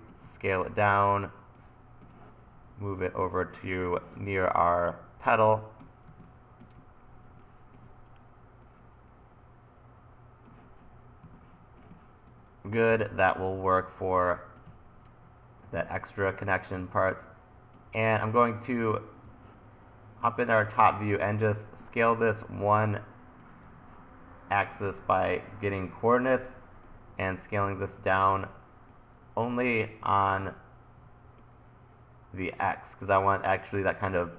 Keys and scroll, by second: 0.2 e, 5.3 1, 11.3 1, 12.3 1, 12.9 t, 14.7 e, 18.1-19.8 typing, 24.4 super+z, 27.8 super+z, 31.0 super+z.